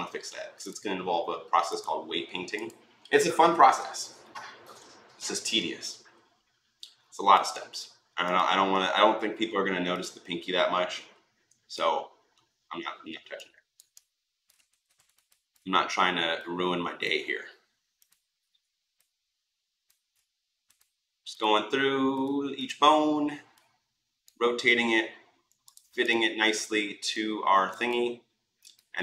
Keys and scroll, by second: 14.5 ctrl+z.